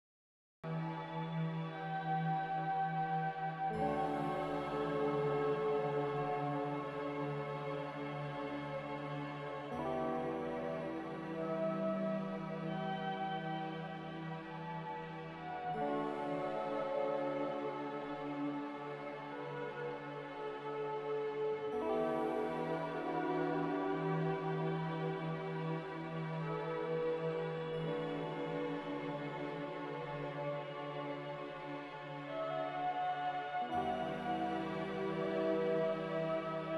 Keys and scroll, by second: 12.7 z, 22.5 F9, 23.7-26.4 typing, 28.2 a, 36.3 m.